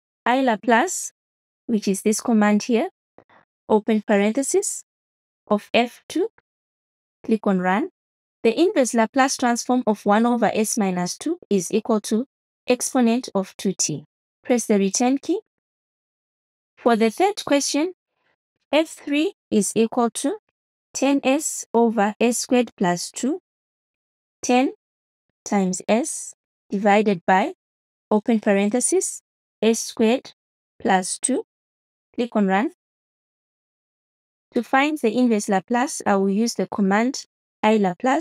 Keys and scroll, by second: 0.0 l, 0.3 a, 4.6 shift+9, 6.1-7.1 typing, 15.0 Return, 18.3-19.6 typing, 23.3 BackSpace, 24.2 1, 25.8-27.1 typing, 28.6 shift+9, 30.0-31.2 typing, 37.2 Return.